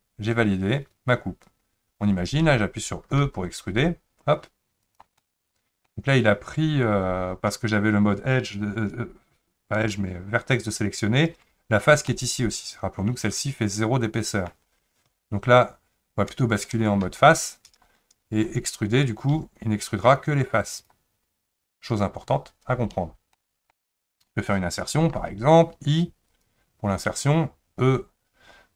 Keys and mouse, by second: 3.2 e, 5.2 middle click, 12.2-14.5 middle drag, 15.1 ctrl+z, 17.1 3, 19.3 e, 23.4 shift+middle click, 25.2 i.